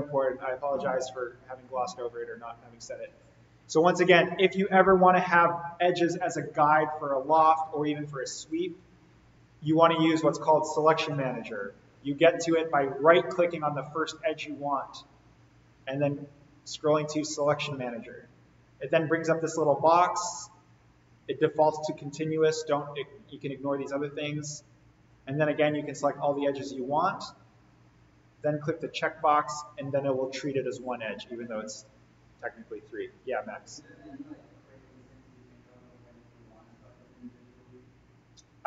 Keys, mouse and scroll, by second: 0.7 click, 3.1 scroll up 1, 12.1-13.2 scroll down 1, 14.1 right click, 17.1-20.6 drag, 24.9 click, 28.7 click.